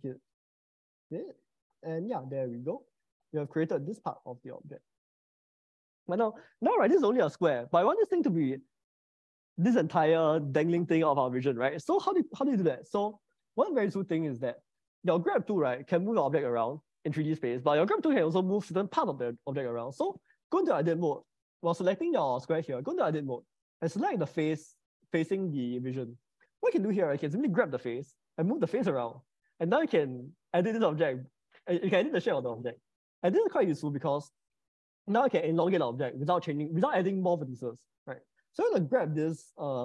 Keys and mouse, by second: 2.6-3.9 middle drag, 12.5 click, 13.2 middle click, 14.6 click, 14.8 Tab, 15.2 Tab, 16.0 g, 19.8 Escape, 21.2 Tab, 28.2 g, 34.2 Escape.